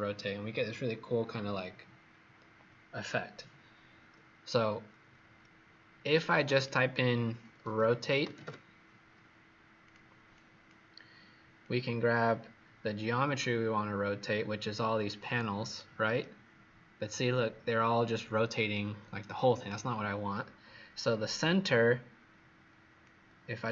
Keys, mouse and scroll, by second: 6.3 click, 6.4 click, 7.3-8.9 typing, 9.7 click, 10.2 click, 11.6 click, 15.7 right click, 23.0 click.